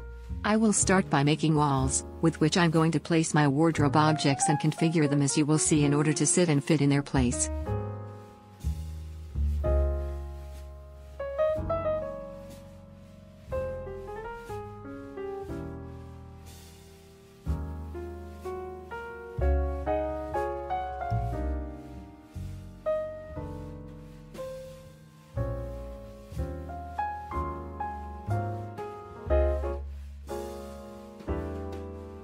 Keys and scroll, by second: 1.7 shift+r, 2.4 ., 2.8 Return, 3.4 Caps_Lock, 3.7 Escape, 9.8 Escape, 15.5 Escape, 17.3 Escape, 19.8 Escape, 20.8 Escape, 26.0-27.7 typing.